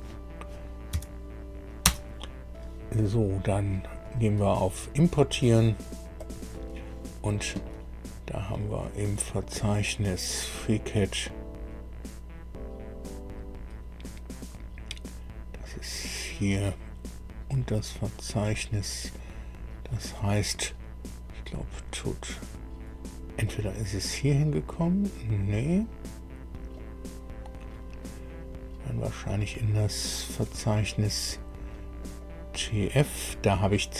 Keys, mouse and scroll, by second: 0.9 f, 1.8 Return, 4.0 click, 6.1 click, 8.7-9.1 scroll down 1, 9.9-10.6 scroll down 3, 11.1-11.7 scroll down 2, 15.5 click, 16.3-16.7 scroll down 1, 16.8 scroll down 1, 17.5-18.6 scroll down 3, 23.4 click, 26.7 click, 27.6-29.7 scroll down 5, 31.9 click.